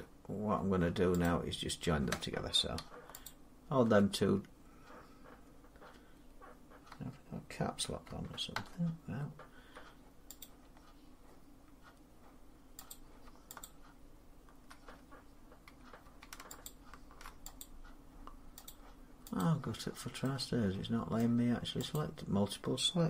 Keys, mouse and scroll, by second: 1.1 click, 3.1 shift+click, 7.9 Caps_Lock, 10.3 click, 12.8 click, 13.5 shift+click, 16.5 click, 17.5 click, 18.1 shift+click, 18.5 click, 19.2 click, 19.7-20.1 scroll down 4, 21.0 middle click, 21.1 middle click, 21.8 click.